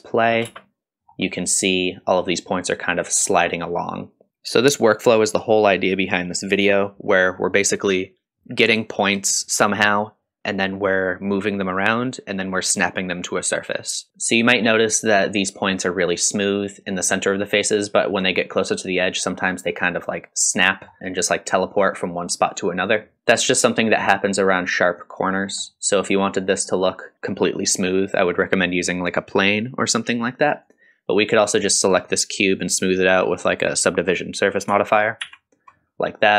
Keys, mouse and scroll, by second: 0.5 space, 1.0 scroll down 1, 1.3-2.3 middle drag, 2.3 scroll up 2, 3.0 middle click, 3.6 scroll up 3, 14.1 middle click, 14.1 scroll down 1, 15.7-17.2 scroll down 1, 17.4-18.1 middle drag, 20.6 middle drag, 23.1 middle click, 23.1-24.1 scroll down 1, 25.4-25.7 scroll down 2, 25.7 middle click, 26.3-26.7 scroll up 1, 26.7 middle click, 30.6 click, 35.2 ctrl+2, 35.9 scroll up 2.